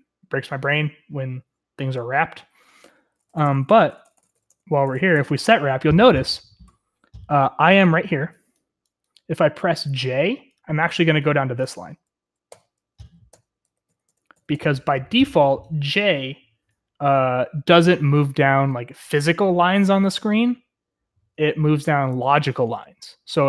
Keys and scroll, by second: 3.1-5.5 typing, 12.5-15.0 typing.